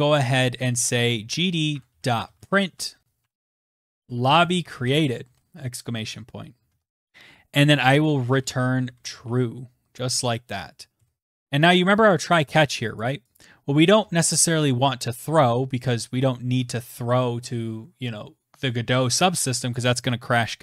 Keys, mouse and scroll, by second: 0.0-8.0 typing, 4.1 Right, 9.2 typing, 9.9-10.7 scroll, 10.7 click, 10.7 scroll, 11.2 click, 11.6 click, 12.2-12.7 scroll, 14.8 click, 18.6 BackSpace.